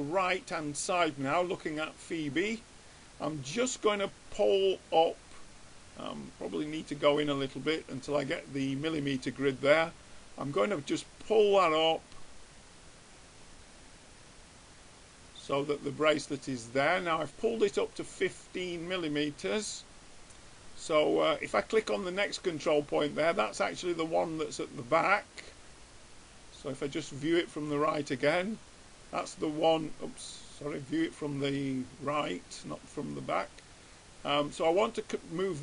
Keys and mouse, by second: 2.2 middle click, 3.6-5.3 middle drag, 6.6-8.2 middle drag, 9.8 click, 21.7 middle click, 22.6 click, 23.2 middle click, 23.2 right click, 23.5 middle click, 23.6 middle click, 24.2 middle click, 27.3-29.2 drag, 31.1-32.9 drag.